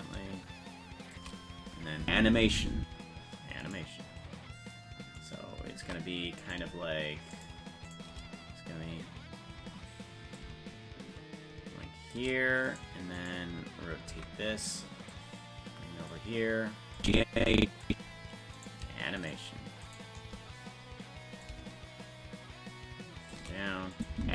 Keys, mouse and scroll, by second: 0.0-1.2 shift+drag, 2.0 space, 3.7 right click, 7.4 shift+right click, 10.4-12.1 shift+drag, 12.7 right click, 14.1 alt+r, 14.1 right click, 15.1-16.1 drag, 17.0 click, 18.6 right click, 19.3-20.3 shift+right drag, 21.4-23.3 drag, 23.9 click, 24.1 space.